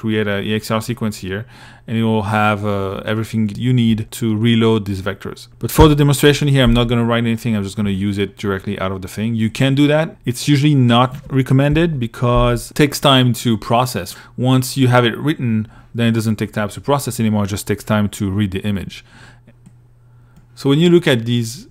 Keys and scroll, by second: 5.0 Delete, 10.9 Delete.